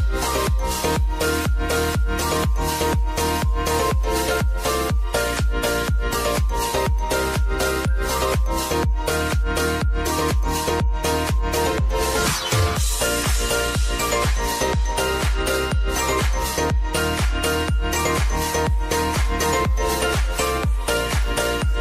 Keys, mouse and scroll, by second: 11.9 click, 12.6 p, 13.9 click, 17.2 Return, 18.0 click, 20.5 alt+Num_Lock, 20.5 click, 21.2 alt+click.